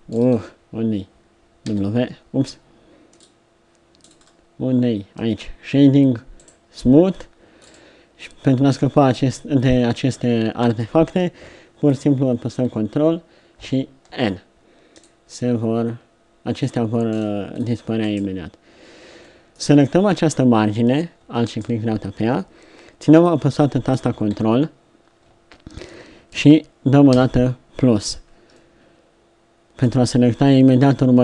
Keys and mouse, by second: 1.7 w, 7.7 click, 13.5 ctrl+n, 17.5-19.3 middle drag, 24.3 z, 27.2 ctrl+KP_Add.